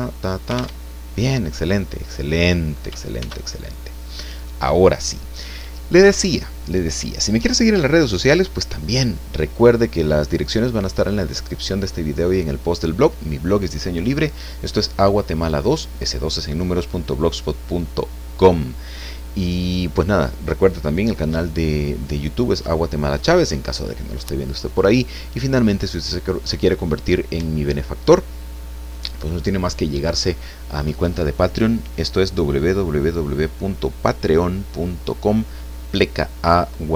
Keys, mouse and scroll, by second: 0.8 alt+Tab, 1.8-2.9 drag, 3.2 ctrl+s, 3.6 ctrl+click.